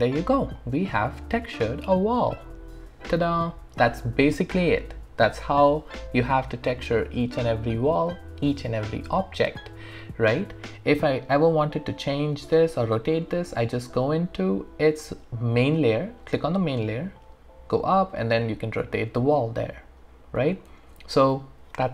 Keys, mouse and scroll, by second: 0.0 alt+right click, 0.6 alt+click, 2.6 alt+middle click, 12.7 click, 16.8 scroll up 1, 18.2-20.7 drag, 20.7 ctrl+z.